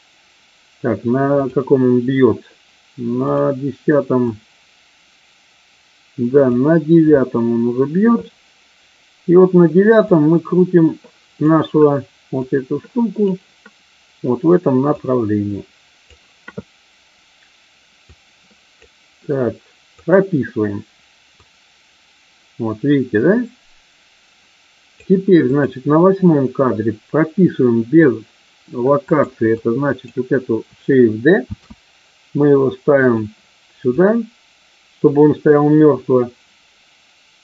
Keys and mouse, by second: 1.3 click, 3.2 click, 4.2-6.5 drag, 10.1-11.5 drag, 12.3-13.3 drag, 15.0-16.2 drag, 18.0 click, 20.0 click, 21.3-25.1 drag, 25.5 click, 29.0 click, 29.5-30.1 drag, 31.5 shift+d, 33.0 click, 33.8-37.4 drag.